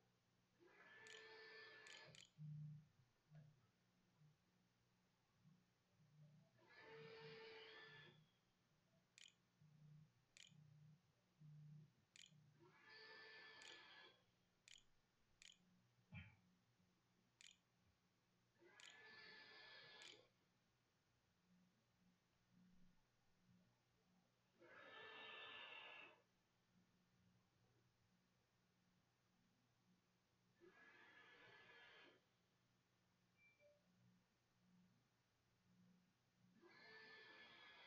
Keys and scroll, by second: 0.9-3.0 typing, 8.7-10.3 typing, 12.1-18.4 typing, 19.2 ctrl+a, 19.8 ctrl+s, 20.8 a.